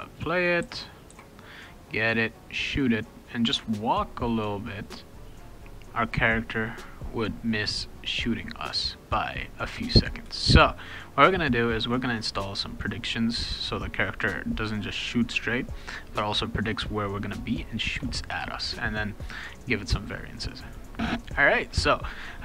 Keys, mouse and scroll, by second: 0.6 w, 1.1 e, 1.4-2.5 right drag, 2.2 click, 3.5 a, 10.2 shift+a, 19.8 click.